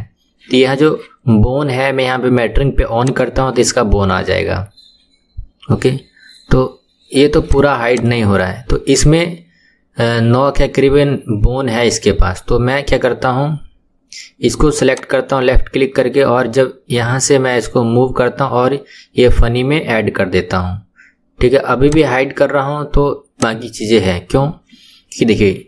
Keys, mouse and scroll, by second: 3.0 click, 7.4 click, 7.9 click, 14.9 click, 21.8 click, 23.4 click.